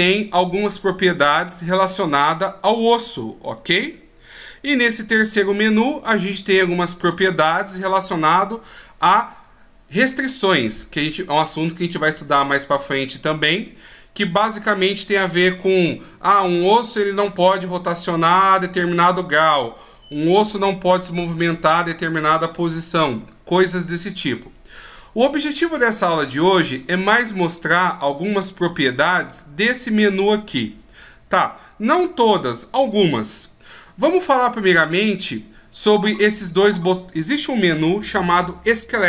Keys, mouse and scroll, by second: 5.1 click, 26.9 click.